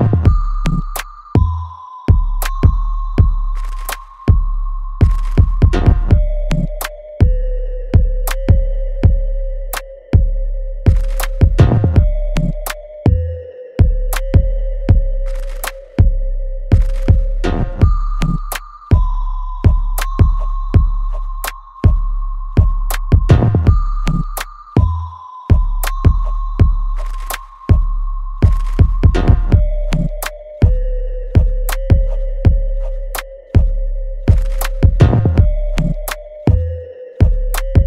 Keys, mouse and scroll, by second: 0.3 right click, 1.1 click, 1.3 alt+click, 1.7 alt+middle click, 2.1 alt+right click, 2.6 alt+click, 3.5 right click, 4.7 click, 7.8 click, 11.0 ctrl+b, 11.0 click, 11.1-13.5 ctrl+drag, 13.5 click, 14.6-16.9 ctrl+drag, 16.9 right click, 17.6 click, 17.9 alt+right click, 18.3-20.3 alt+drag, 20.3 alt+middle click, 20.9 alt+click, 21.8 alt+right click, 22.2 alt+click, 23.1 ctrl+shift+click, 23.1 s, 23.4 click, 24.1 alt+right click, 24.7 alt+middle click, 25.8 alt+right click, 27.0 click, 27.6 alt+click, 28.3 alt+right click, 30.4 shift+click, 32.4 alt+middle click, 32.9 alt+right click, 33.4-37.3 alt+middle drag, 37.3 shift+click.